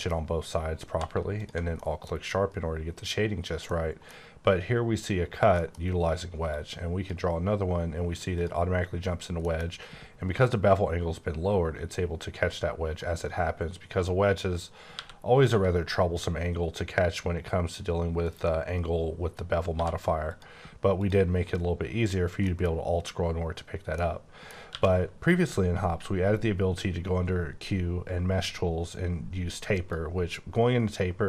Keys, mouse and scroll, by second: 0.9 q, 1.4 alt+click, 1.8 middle click, 2.0-3.7 scroll down 1, 3.7 middle click, 5.6 middle click, 6.5 click, 8.3 click, 9.4 middle click, 9.7-11.9 scroll up 5, 12.4-13.0 scroll down 2, 13.0 click, 14.9-15.4 typing, 18.2 click, 19.7 q, 20.3 click, 21.0 click, 22.1-22.4 scroll down 1, 22.4 middle click, 23.6-24.0 scroll down 2, 24.0 middle click, 24.7 q, 29.7 click.